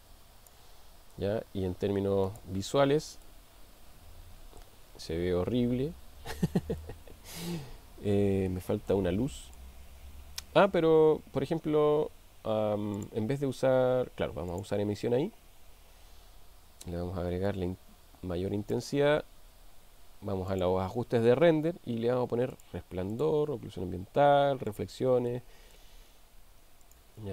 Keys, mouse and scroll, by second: 2.3 click, 3.4-4.6 middle drag, 8.9-9.6 middle drag, 14.6 click, 17.6-18.8 drag, 22.6 click, 23.2 click, 24.7 click, 25.3-25.9 middle drag, 26.9 click.